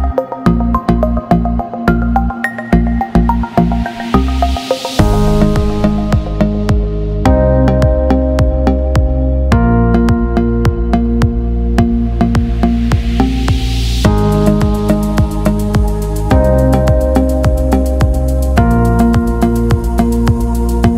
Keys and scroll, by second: 16.7 ctrl+0.